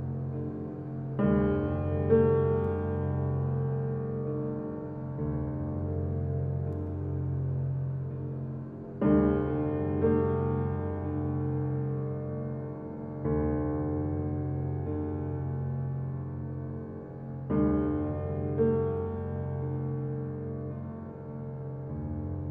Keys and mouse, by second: 5.0 ctrl+r, 9.2 ctrl+z, 13.6 ctrl+r, 15.5 1, 16.2 click, 17.2 2, 17.6 click, 18.1 shift+click, 18.6 s, 21.0 1, 21.6 click, 22.1 g.